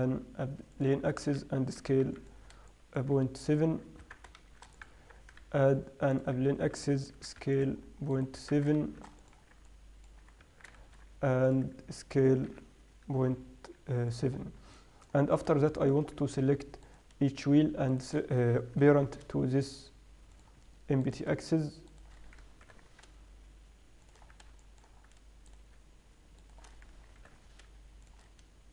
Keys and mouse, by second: 0.2 shift+a, 1.7 s, 3.1-3.9 drag, 3.9-6.1 right drag, 6.1 Tab, 6.1 shift+s, 6.1 shift+a, 7.0 s, 8.6 right click, 8.8 Tab, 9.2 shift+s, 10.9 Tab, 11.2 shift+a, 12.3 s, 14.8 middle click, 17.3-20.2 right drag, 19.2 ctrl+p, 21.4-24.1 right drag, 23.0 ctrl+p, 24.6 middle click, 25.9-26.2 right drag, 26.8 right click, 27.6 ctrl+p.